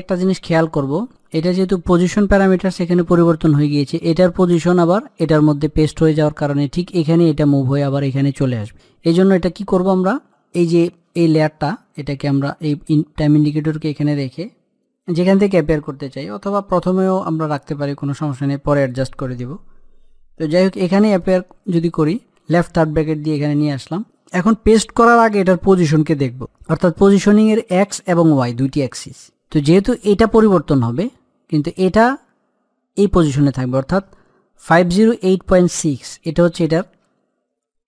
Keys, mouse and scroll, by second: 0.3 scroll up 1, 9.0-10.2 scroll down 1, 10.7 scroll, 22.3-24.3 scroll down 1, 24.4 click.